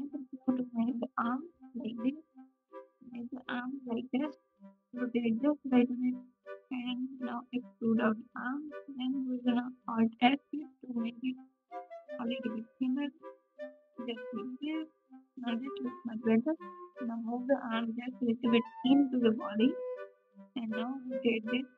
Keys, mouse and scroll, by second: 1.9 g, 3.9 s, 4.2 g, 6.5 e, 8.4 alt+s, 9.6 click, 9.6 r, 9.6 1, 9.8 g, 11.3 3, 11.3 x, 13.7 1, 13.7 s, 15.6-16.9 drag, 16.9 s, 19.3 r, 20.6 ,, 20.9 KP_3, 20.9 r.